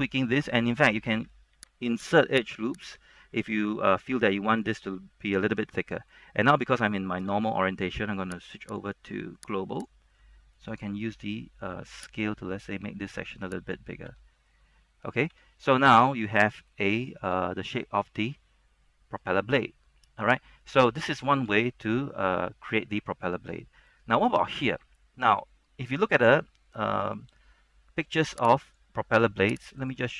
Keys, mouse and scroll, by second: 1.6 ctrl+r, 2.1 click, 3.7-6.4 middle drag, 6.4 scroll up 1, 6.9 scroll down 1, 7.1-8.2 shift+middle drag, 8.8 click, 10.3 middle click, 11.3-12.4 scroll up 1, 12.4 click, 14.2 Tab, 14.5 scroll down 1, 14.6 middle click, 15.5 Tab, 16.1 z, 16.4 middle click, 17.1-17.4 scroll up 2, 17.6-20.7 middle drag, 21.5 shift+middle click, 21.7 scroll up 1, 25.2 scroll down 1, 25.5-28.8 scroll up 1, 28.8 click.